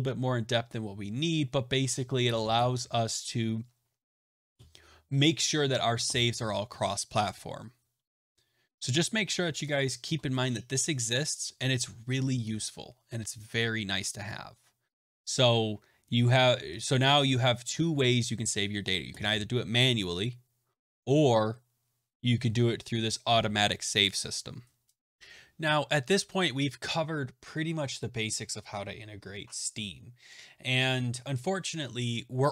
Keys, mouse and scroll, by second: 1.4 click, 23.2 right click, 24.0 click.